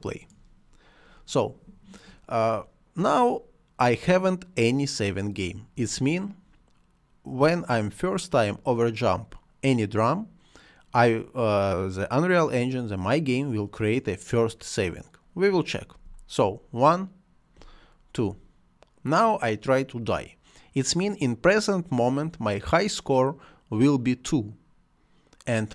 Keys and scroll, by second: 5.5 space, 15.7 space, 17.3 space.